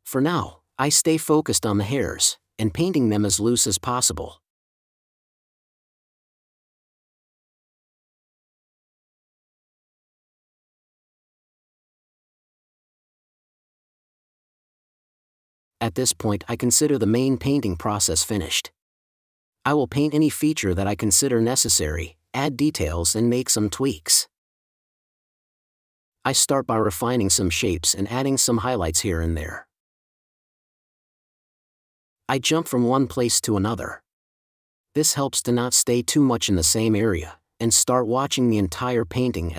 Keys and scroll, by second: 0.2 n, 2.0 space, 2.8 super+space, 4.1 space, 4.8 space, 5.2 super+s, 5.4 space, 6.9 space, 8.4 space, 9.9 super+s, 10.3 End, 10.5 space, 12.3 super+Tab, 16.2 space, 22.9 2, 23.8 super+z, 26.3 5, 28.7 space, 30.6 super+space, 32.0 space, 38.9 super+z, 39.0 super+z.